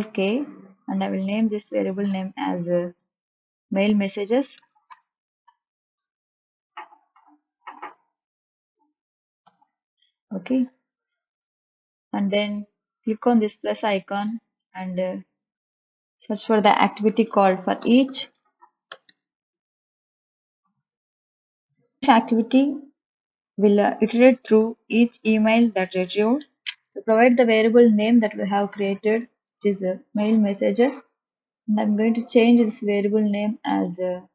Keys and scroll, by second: 1.4-2.9 typing, 4.5 m, 4.7 a, 4.9 i, 5.1 l, 6.5 shift+m, 6.9 e, 7.8 g, 8.4 e, 9.4 Return, 17.0-19.0 typing, 20.6 Return, 29.1 m, 29.5 a, 30.1 i, 30.9 Return.